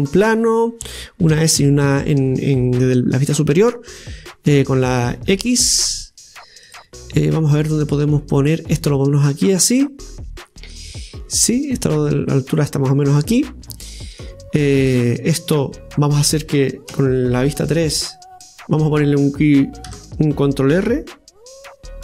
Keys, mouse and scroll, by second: 1.3 s, 7.6-9.8 drag, 9.9-11.4 middle drag, 11.4-13.8 drag, 13.9 middle click, 14.6-16.9 scroll up 2, 16.9-18.3 scroll up 1, 18.3 scroll up 1, 18.4 middle click, 19.9 Tab.